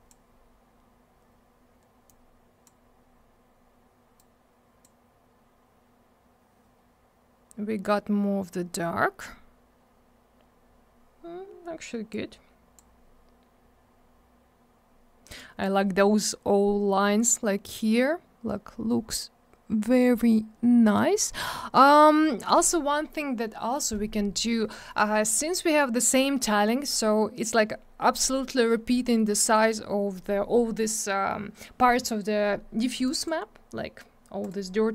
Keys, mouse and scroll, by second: 2.0 click, 4.1 click, 8.7-9.0 scroll up 1, 10.0-10.7 scroll down 1, 12.1 click, 13.8 scroll up 1, 15.3 click, 17.2-17.9 scroll down 1, 18.7-19.7 scroll up 1, 19.7 scroll down 1, 20.5-20.9 scroll up 1, 21.3-21.9 scroll down 1, 24.7 middle click, 24.8 middle click, 25.0 scroll down 1, 25.2 middle click, 25.3 double middle click, 33.0 click, 33.1 click, 33.1 click, 33.2 double click, 34.4 click, 34.4 click.